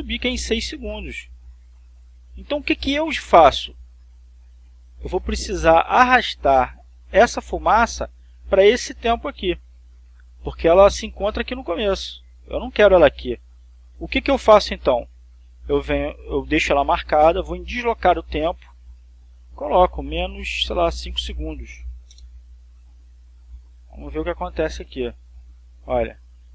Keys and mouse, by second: 11.4-13.8 drag, 17.3 click, 19.1-20.1 drag, 20.7 -, 21.3 5, 22.7 Return, 25.0-26.5 drag.